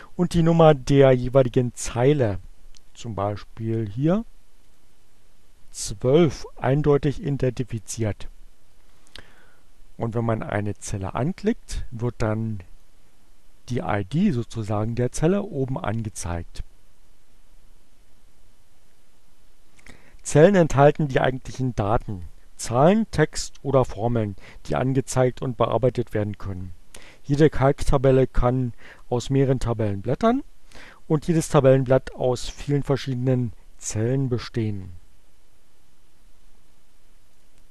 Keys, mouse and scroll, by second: 4.3 click, 9.2 click, 12.9-14.1 drag, 37.2 click.